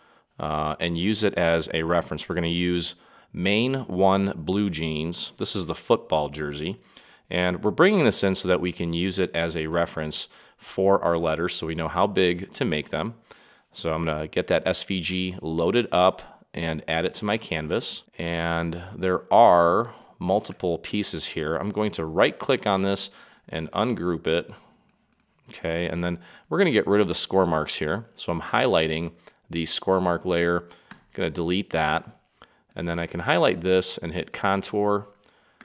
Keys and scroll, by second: 30.9 Delete.